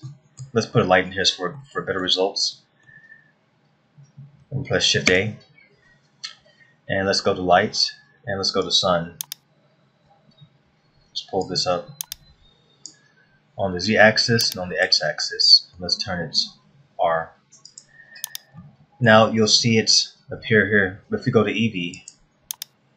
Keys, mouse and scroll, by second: 0.0-0.5 scroll down 1, 0.7 shift+middle click, 2.1 middle click, 3.2 middle click, 5.7 shift+a, 10.9-12.0 scroll down 1, 12.1 click, 14.5 click, 15.7 scroll up 1, 17.2 r, 19.3 shift+middle click, 22.6 click.